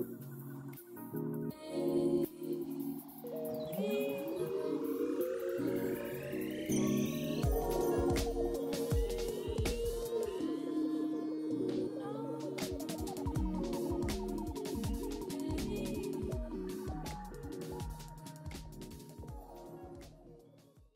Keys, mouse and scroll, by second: 1.4-1.8 scroll up 3, 1.8-2.7 scroll down 2, 6.8 scroll down 1, 11.4-13.0 scroll down 4, 12.7-15.5 typing, 13.0 scroll down 2, 18.7 6, 20.3 right click.